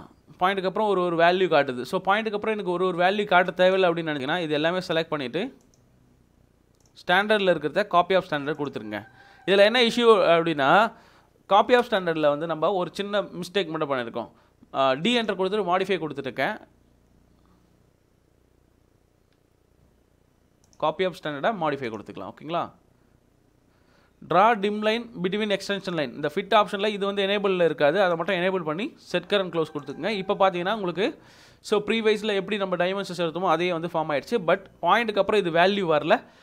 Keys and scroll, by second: 10.3 Escape, 11.8 d, 11.8 space, 19.9 Escape.